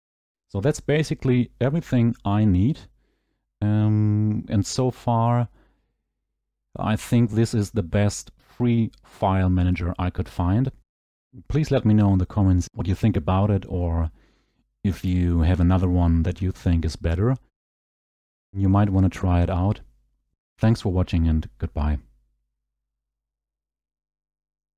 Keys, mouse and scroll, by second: 17.4 scroll, 19.2 middle click, 19.2 scroll, 19.7 middle click, 20.1 middle click, 20.2-21.0 scroll, 21.0-22.5 scroll.